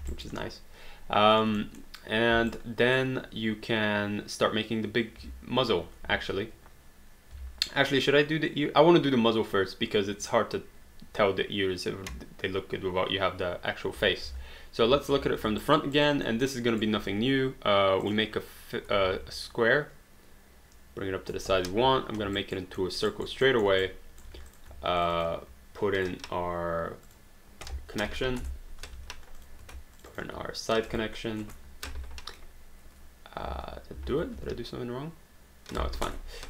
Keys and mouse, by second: 0.1 alt+d, 0.2 alt+right click, 0.4 alt+click, 1.6 alt+middle click, 2.5 alt+right click, 6.3 space, 7.3 space, 14.3 space, 15.1 space, 15.6 alt+right click, 16.3 alt+middle click, 16.5 alt+right click, 18.0 click, 19.0 r, 19.5 click, 21.7 3, 22.4 alt+right click, 22.8 alt+middle click, 23.1 alt+right click, 23.5 alt+middle click, 23.8 right click, 24.3 q, 24.5 click, 25.0 shift+click, 27.1 click, 28.4 Return, 29.0 q, 29.4 click, 30.0 shift+click, 31.4 Return, 33.5 ctrl+z, 34.4 q, 36.1 Return.